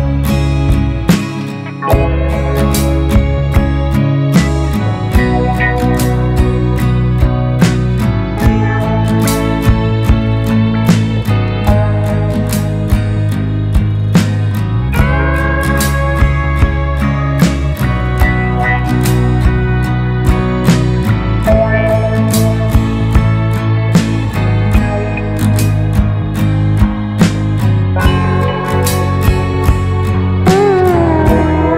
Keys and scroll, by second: 15.4 BackSpace, 18.6 Delete, 19.3 Right, 19.4 BackSpace, 24.2 Down, 24.4 Down, 26.7 ctrl+space, 30.4 ctrl+space.